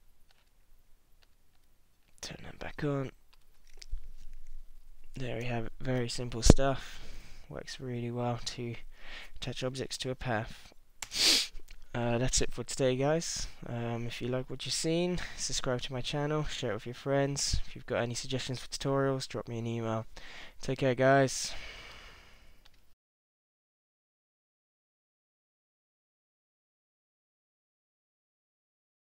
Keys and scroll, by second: 11.0 space.